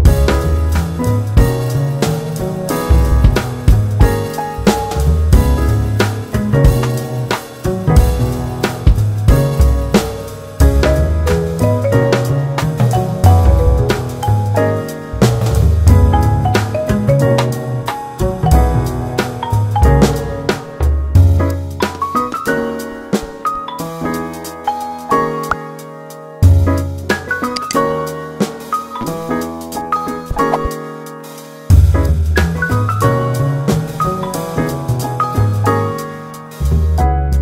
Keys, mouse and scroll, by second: 1.3 scroll up 1, 1.8-3.0 middle drag, 3.0 ctrl+r, 4.5 ctrl+r, 6.1 Tab, 7.0 ctrl+r, 10.0 Tab, 21.7 Tab, 22.8-24.4 drag, 25.6 g, 27.5 scroll down 2, 28.1 Tab, 29.1 g, 30.1 scroll up 1, 30.3 Tab, 30.8 click, 31.7 e, 36.3 3, 36.5 click, 37.3 g.